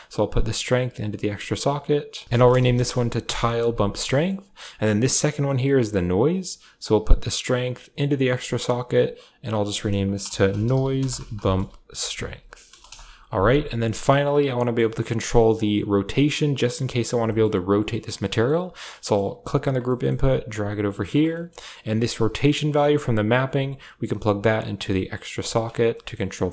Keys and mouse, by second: 0.8 click, 1.7-3.1 drag, 2.2 BackSpace, 5.1-6.1 drag, 6.7-8.2 drag, 8.7 click, 8.9-12.7 drag, 14.5 middle click, 17.2 shift+middle click, 17.8 middle click, 18.3 middle click, 18.9 middle click, 19.3 click, 19.8 middle click, 20.0 g, 21.3 click, 22.6 click, 23.2 click, 24.0-25.1 drag, 25.3 click, 25.4 click, 25.9 middle click.